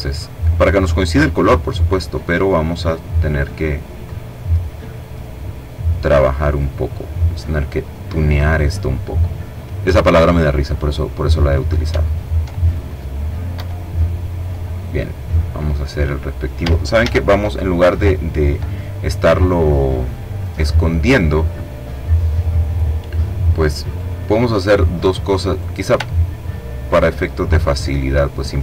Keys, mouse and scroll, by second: 1.0 click, 2.1-3.7 drag, 4.1-6.2 drag, 8.9 click, 10.0 click, 11.1-11.6 ctrl+scroll down 2, 11.7 ctrl+click, 12.7 Delete, 16.1 ctrl+z, 17.9 middle click, 18.2 click, 18.8-20.0 middle drag, 22.1-23.5 drag, 24.6 click, 25.3-27.6 ctrl+drag, 27.6-28.6 scroll up 4.